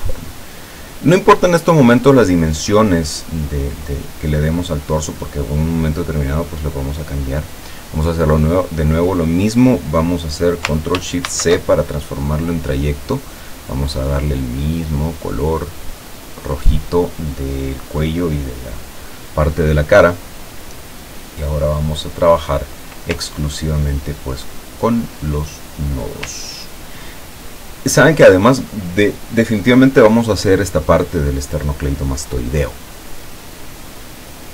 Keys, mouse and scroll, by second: 11.3 ctrl+shift+c, 13.5 click, 15.6 click, 22.0 click, 23.7-24.1 ctrl+scroll up 2, 24.9 ctrl+middle click, 26.6 ctrl+scroll down 2.